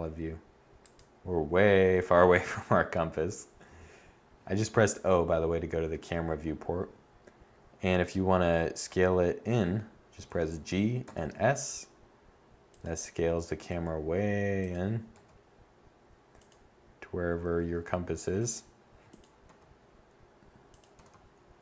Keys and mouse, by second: 9.8 g, 12.3 click, 12.9 g, 14.7 g, 17.0 g, 19.0 g, 20.5 r.